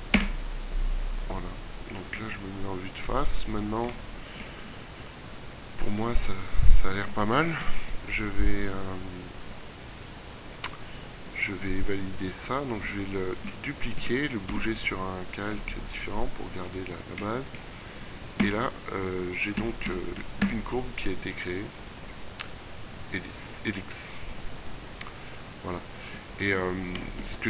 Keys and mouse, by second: 0.0 Return, 1.3 KP_1, 6.1 middle click, 7.7 KP_3, 13.5 shift+d, 14.4 m, 18.2 Tab, 19.4 a, 19.9 a, 20.5 a, 20.9 middle click, 26.4-27.4 middle drag.